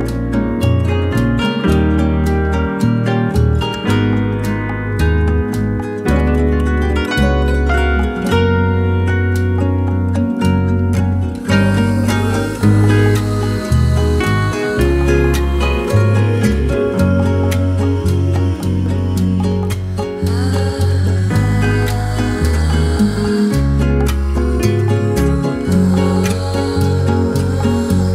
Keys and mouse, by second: 0.7 k, 9.6 k, 18.5 shift+middle click, 19.3 shift+middle drag, 20.1 k, 27.9 shift+middle drag.